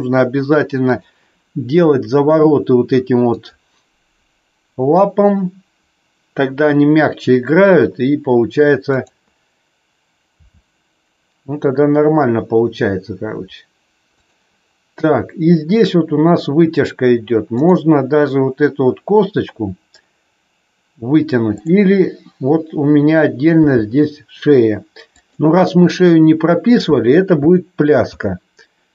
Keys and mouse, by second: 3.3 click, 8.9-9.5 drag, 10.4 g, 17.5-18.1 drag, 21.4 click, 23.5 g, 25.1 click, 28.1 ctrl+z.